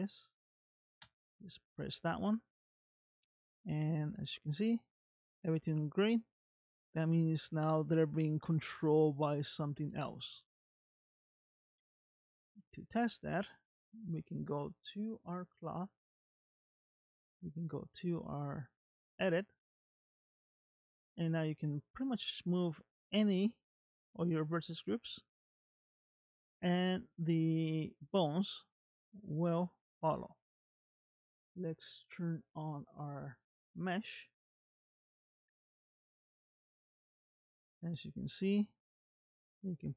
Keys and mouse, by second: 2.8-5.1 middle drag, 5.5 shift+middle click, 6.6 middle click, 9.9 shift+middle click, 12.4 ctrl+Tab, 15.6 click, 17.0 Tab, 20.3 click, 21.7 click, 22.7 g, 26.1 click, 26.8 g, 28.6 click, 29.1 g, 34.7 shift+middle click, 35.4 click, 36.3 g, 38.7 click, 39.3 g.